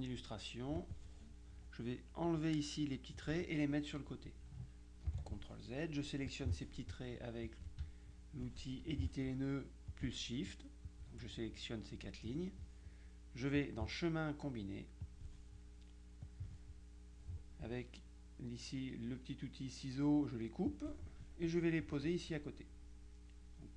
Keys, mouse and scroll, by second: 0.9 click, 5.2 ctrl+z, 6.4 click, 7.6 click, 10.0 shift+click, 12.3 click, 13.6 click, 15.1 click, 16.3 click, 20.8 click, 22.2 click.